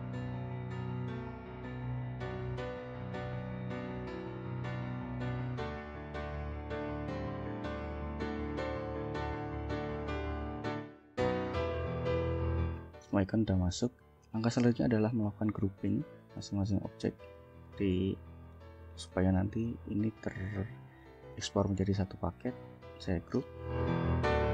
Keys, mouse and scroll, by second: 0.4 click, 0.8 ctrl+shift+click, 1.5 ctrl+shift+Up, 1.6 ctrl+shift+Down, 2.4 click, 2.7 ctrl+shift+click, 3.2 ctrl+shift+Up, 4.0 ctrl+click, 4.4 ctrl+shift+click, 4.9 ctrl+shift+Up, 5.6 click, 6.1 ctrl+shift+click, 6.6 ctrl+shift+Up, 7.5 ctrl+click, 7.8 ctrl+shift+click, 8.2 ctrl+shift+Up, 8.3 ctrl+shift+Down, 8.9 ctrl+click, 9.5 ctrl+shift+click, 9.8 ctrl+shift+Up, 11.0 click, 11.4 ctrl+shift+click, 11.7 ctrl+shift+Up, 11.9 ctrl+shift+Down, 13.6 click, 14.1 scroll down 2, 14.5 scroll up 2, 15.1-15.7 ctrl+scroll up 4, 16.1 shift+scroll down 2, 16.8 shift+click, 17.5 click, 17.9 click, 20.4 click, 20.7 click, 22.0 click, 22.5 click, 23.8 ctrl+g, 24.2 ctrl+click.